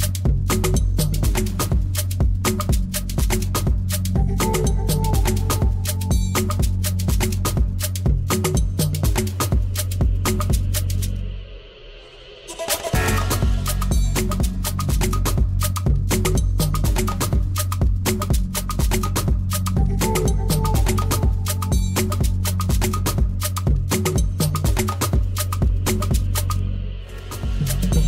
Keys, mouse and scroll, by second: 0.4 click, 1.6 h, 2.8 l, 3.3 l, 3.6 l, 4.1 l, 5.4 l, 6.7-8.3 drag, 9.0 click, 10.2 h, 11.3-13.4 typing, 15.3-17.1 drag, 17.6 click, 18.8 h, 21.0 Tab, 25.7-27.9 drag.